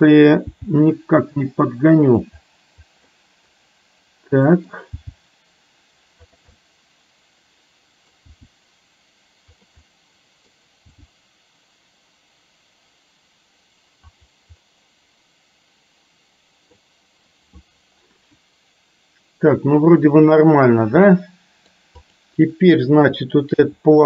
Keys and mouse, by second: 0.6 g, 3.3-5.0 middle drag, 5.0 g, 6.6-8.4 middle drag, 8.4 g, 9.9 middle click, 11.0 g, 14.6-16.9 middle drag, 21.1 middle click, 22.1 click, 23.7 s.